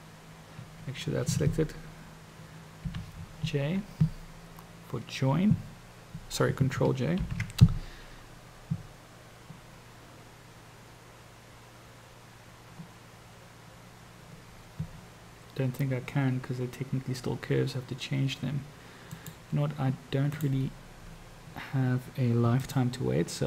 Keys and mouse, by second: 19.1 click, 20.4-22.7 drag.